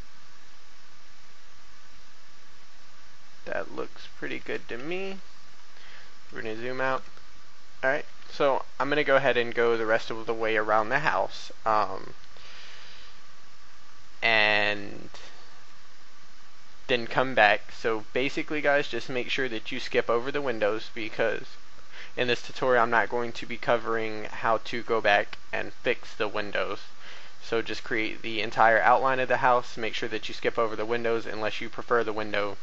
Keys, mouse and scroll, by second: 4.1 shift+click, 4.7 shift+a, 5.1 scroll down 1, 6.4 shift+middle click, 12.2 scroll down 1, 12.9 shift+middle click, 15.0 shift+middle click, 19.6 scroll up 1, 20.2 shift+middle click, 25.0 shift+middle click, 27.2 shift+middle click, 28.2-30.9 scroll down 1.